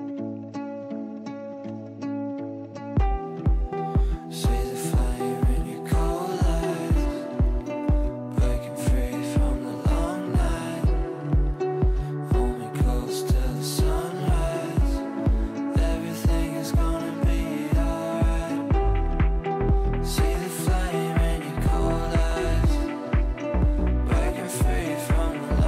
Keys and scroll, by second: 5.1 Delete, 12.8 shift+Page_Up, 21.6 g.